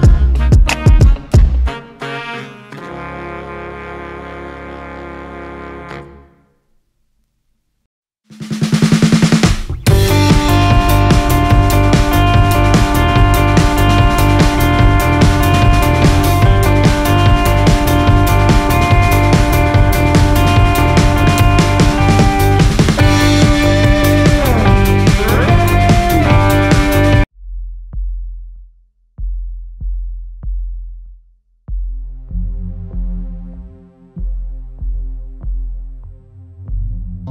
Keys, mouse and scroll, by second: 2.3 click, 3.4 click, 6.1-8.5 drag, 9.9-13.3 drag, 15.8 click, 16.2 Tab, 16.5 `, 17.9 click, 19.1 scroll down 1, 19.3 scroll up 1, 19.5 a, 20.1 click, 23.0-25.3 drag, 28.3 click, 31.7-37.3 drag.